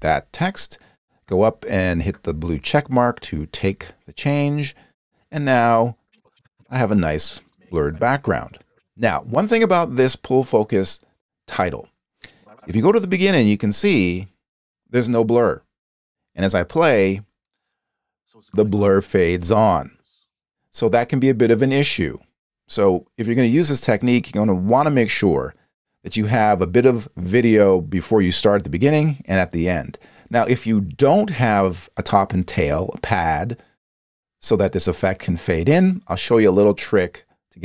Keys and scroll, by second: 17.0 space, 20.6 space.